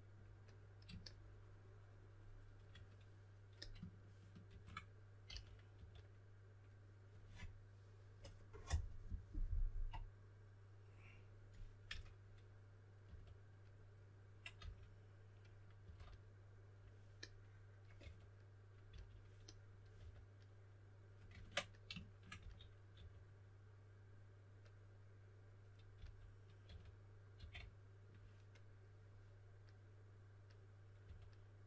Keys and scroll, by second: 5.2 s, 5.7 s, 11.6-13.0 typing, 14.5 typing, 15.8 typing, 18.0-19.9 typing, 22.3-23.4 typing, 25.9-27.3 typing, 31.0 2.